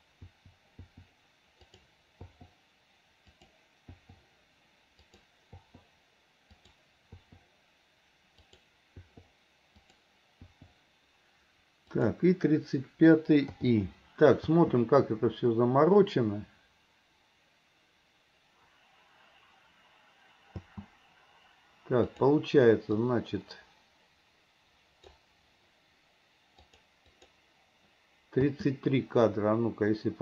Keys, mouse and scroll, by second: 0.3 i, 0.9 i, 1.8 drag, 3.4 drag, 4.0 i, 5.2 drag, 5.6 i, 6.7 click, 8.6 drag, 9.9 click, 10.5 i, 12.1 click, 13.6 i, 14.6 space, 20.7 space, 22.2 click, 23.1 click, 26.6 click, 27.2 click, 28.5 space.